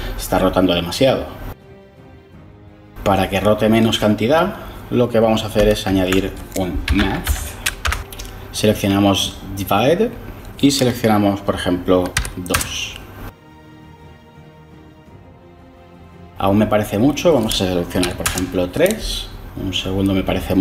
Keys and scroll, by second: 5.8 ctrl+shift+a, 6.5-7.7 typing, 7.7 Return, 12.0 2, 12.4 Return, 17.9 3, 18.1 Return.